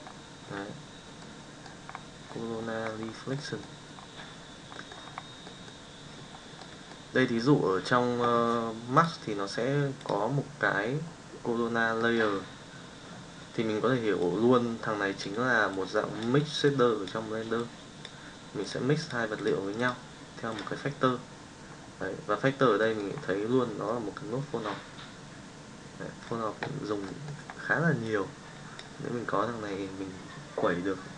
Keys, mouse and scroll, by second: 3.5 middle drag, 4.8 middle click, 27.2 middle click, 28.1 click.